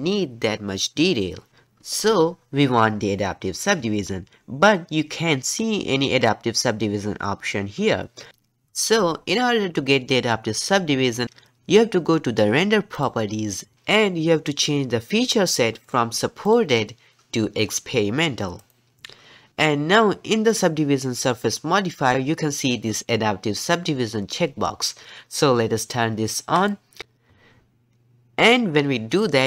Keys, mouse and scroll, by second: 12.9 click, 15.8 click, 16.4-19.4 drag, 20.5 click, 26.6 click.